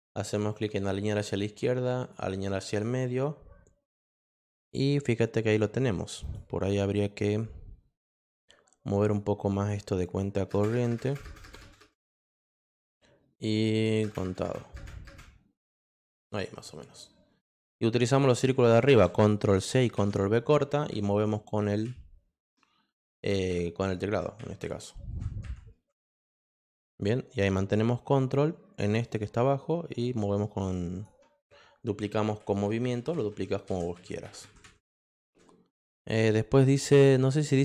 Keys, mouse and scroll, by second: 0.5 click, 2.0 click, 6.2 click, 6.6 click, 9.0 click, 9.5 click, 10.0 click, 10.7 space, 10.9 space, 11.0 space, 11.8 space, 13.7 click, 14.0 space, 15.0 space, 15.8 click, 18.2 click, 19.6 ctrl+c, 20.0 ctrl+v, 29.0-31.0 drag, 35.7 click.